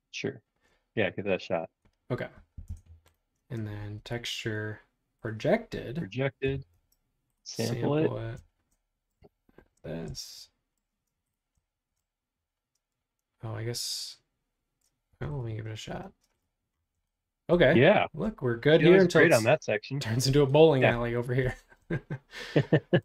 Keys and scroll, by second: 2.6 Return, 6.4 b, 9.6 shift+g, 10.9 space, 15.1 b, 16.2 space.